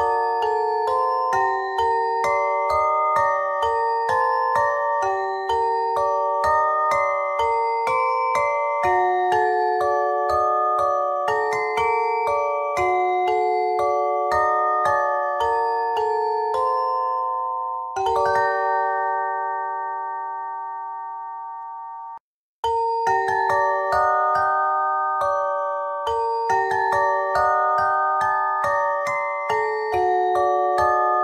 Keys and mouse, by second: 1.6 middle click, 7.7 KP_1, 8.5 e, 10.4 e, 11.3 z, 14.2 KP_1, 18.2 w, 20.2 ctrl+r, 20.8 z, 23.0-26.1 drag, 26.1 ctrl+r, 27.0-28.2 drag, 29.4-30.5 drag, 30.5 z.